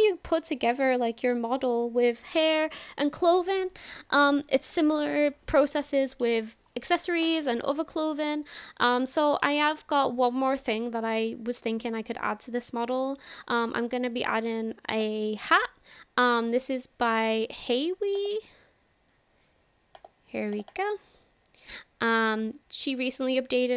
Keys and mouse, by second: 0.2 shift+middle drag, 1.0-1.7 middle drag, 9.8-10.2 shift+middle drag, 10.3-12.0 middle drag, 12.5-12.8 shift+middle drag, 13.0 middle click, 14.9 click.